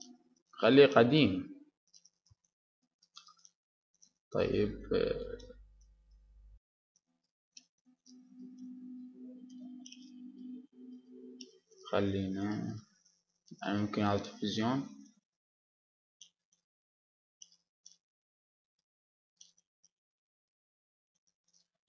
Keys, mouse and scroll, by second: 0.7 click, 1.3-2.9 middle drag, 4.1-7.1 middle drag, 5.8 s, 7.2 click, 7.7-8.9 middle drag, 9.7 s, 12.4 click, 13.3-15.9 middle drag, 18.3 s, 20.1-21.8 drag.